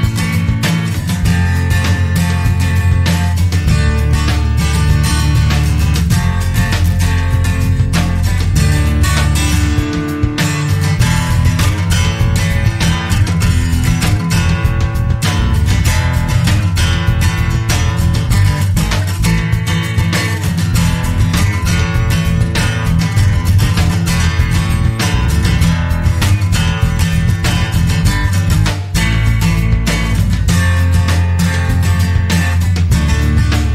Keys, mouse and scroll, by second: 1.0 click, 2.6 1, 3.8 click, 6.1 click, 7.6 2, 9.1 click, 10.1 click, 12.1 click, 15.9 click, 17.7 click, 19.0 click, 19.8 click, 21.3 click, 23.2 click, 26.7 click, 28.3 click, 29.9 click, 31.4 click.